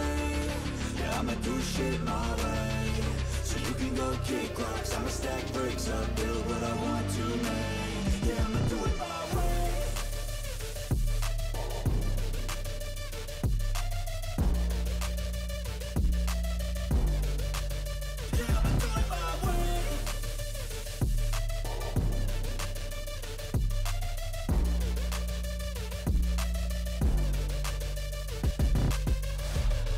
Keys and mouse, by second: 6.9 right click, 7.4 right click, 8.3 right click, 8.8 right click, 9.9 right click, 21.8 right click.